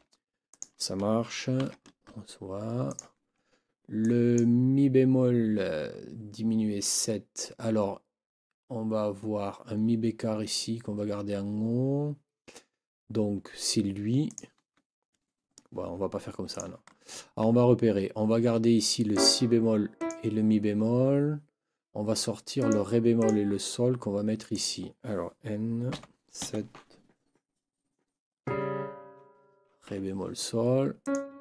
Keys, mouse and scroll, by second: 0.5 click, 1.6 ctrl+v, 2.9 click, 14.3 click, 16.5 click, 19.1 click, 20.0 click, 22.6 click, 23.2 click, 24.5 click, 25.9 n, 26.4 KP_7, 29.9 Escape, 31.0 click.